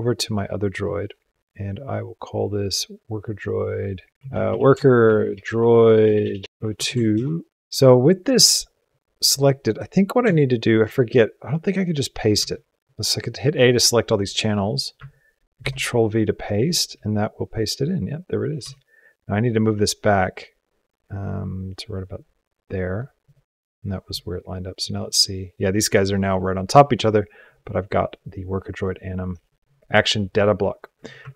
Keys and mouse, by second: 4.1-7.5 drag, 6.0 BackSpace, 10.1 Tab, 12.2 a, 15.4 ctrl+v, 18.4 g, 24.8-26.8 drag, 28.7 click, 31.1 ctrl+Tab.